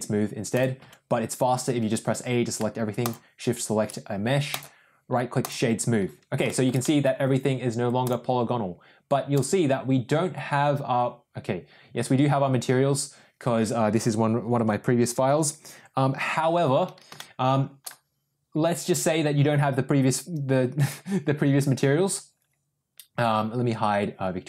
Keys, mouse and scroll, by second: 0.8 a, 2.9 shift+click, 4.5 right click, 6.4 shift+middle drag, 6.7 middle drag, 8.0 click, 9.3 click, 17.1-17.8 shift+middle drag, 18.8 click.